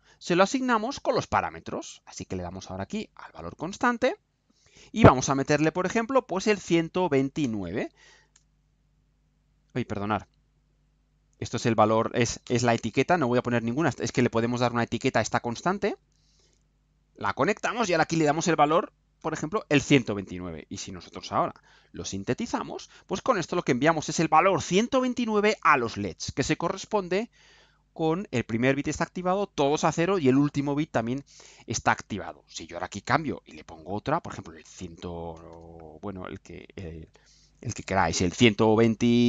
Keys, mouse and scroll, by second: 3.1 click, 4.1 click, 6.4 1, 6.7 2, 7.4 9, 8.3 Return, 10.0 click, 10.5 click, 11.5 click, 12.4 BackSpace, 13.4 click, 15.3-16.3 drag, 16.9 click, 17.8 click, 18.3-19.7 typing, 20.0 click, 21.4 ctrl+u, 32.9 click, 34.6 BackSpace, 35.3 BackSpace, 38.1 1, 38.4 2.